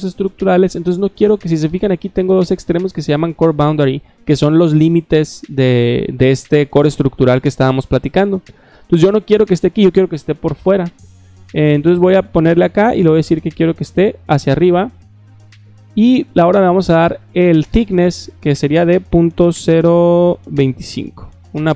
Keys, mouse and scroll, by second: 11.7 click, 13.9 click, 17.1 click, 18.0 click.